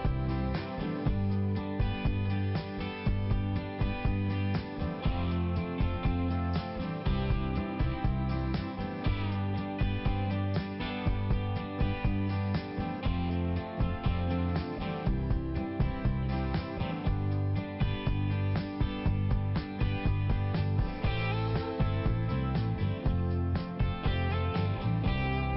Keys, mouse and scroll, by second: 6.0 click, 7.6 click, 10.9 click, 11.8 click, 12.1 click, 12.7 click, 12.9 click, 14.7 click, 14.9 click, 16.9 click, 17.0 click, 18.5 click, 18.6 click, 19.4 click, 21.3 click, 23.1 click, 24.1 click, 24.2 click, 25.3 click.